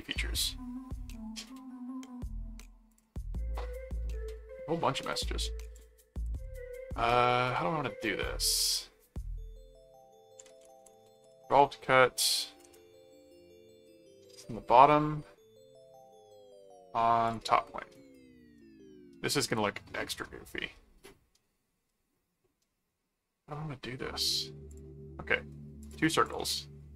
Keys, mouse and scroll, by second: 0.1-2.7 middle drag, 2.9 click, 5.7 click, 10.1-11.8 typing, 12.6 Return, 13.8 ctrl+6, 17.3 click, 17.9 right click, 24.7 click, 25.8 click.